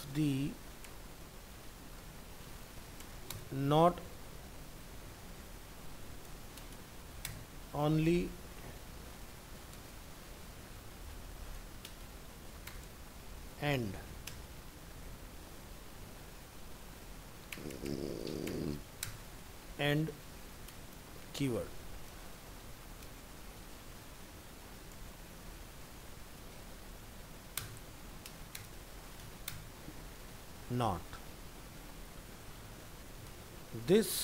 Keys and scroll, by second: 26.8 ctrl+s.